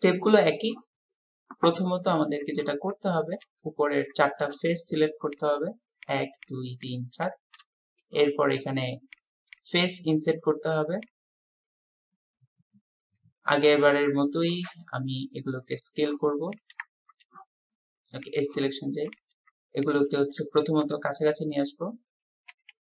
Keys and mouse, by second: 3.7-4.1 middle drag, 4.3 shift+middle click, 5.3 click, 6.8 shift+click, 7.2 shift+click, 7.7 click, 9.5 click, 11.1-13.3 drag, 13.5 click, 16.5 click, 18.2-20.1 drag, 20.5 shift+click, 22.5 g.